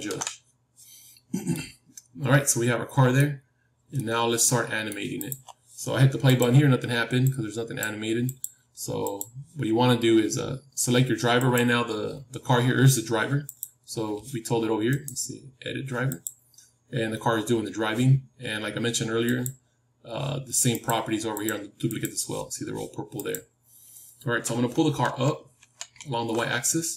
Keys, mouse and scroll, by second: 1.4-3.6 middle drag, 3.9-5.2 middle drag, 5.2-17.9 drag, 9.6-11.9 middle drag, 14.8-17.9 right drag, 19.4-25.5 drag.